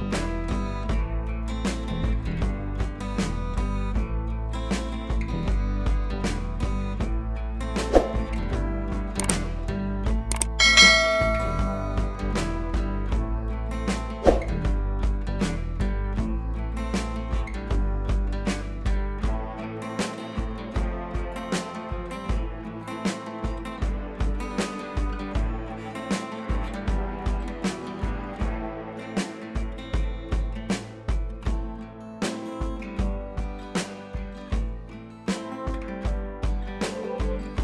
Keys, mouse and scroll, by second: 1.2-1.7 scroll up 1, 1.7 click, 2.9 click, 8.5-8.8 scroll up 1, 9.7 scroll down 1, 10.1 click, 12.7 click, 14.2 click, 15.8 ctrl+r, 17.1-17.6 drag, 18.9-20.3 drag, 21.6-23.5 drag, 24.6-25.4 click, 25.6 scroll down 1, 25.8 scroll up 1, 26.0 scroll down 1, 26.4 scroll up 1, 26.4 alt+scroll down 1, 27.6-29.7 drag, 35.2-37.6 drag.